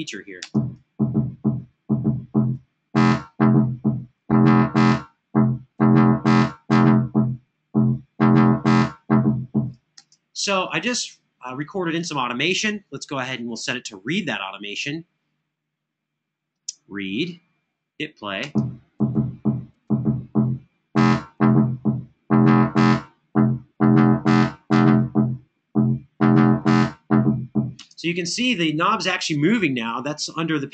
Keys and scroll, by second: 0.2 space, 9.7 space, 18.2 space, 27.6 space.